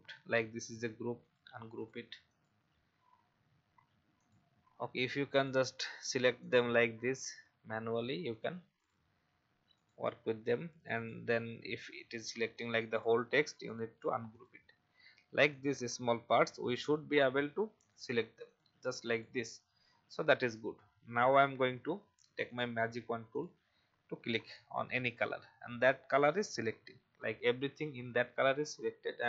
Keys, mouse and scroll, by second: 0.5 right click, 1.2 click, 7.3 right click, 8.3 click, 12.0 right click, 12.9 click, 19.9-21.2 alt+scroll up 1, 22.4 click.